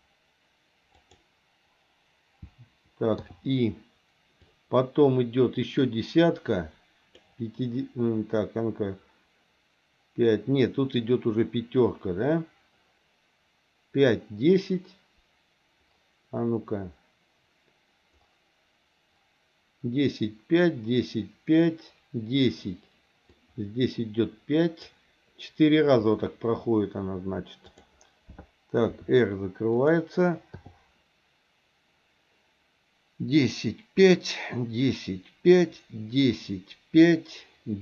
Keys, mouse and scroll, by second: 3.2 i, 4.4-7.2 drag, 23.4-24.9 drag, 28.9 r, 30.5 i.